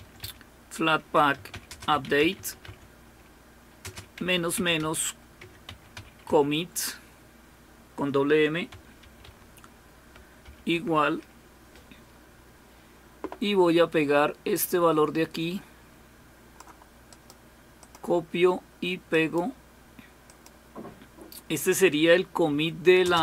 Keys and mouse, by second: 0.0-3.2 typing, 4.3-6.5 typing, 8.0-10.5 typing, 14.5-16.7 drag, 17.2 right click, 17.8 click, 20.3 click.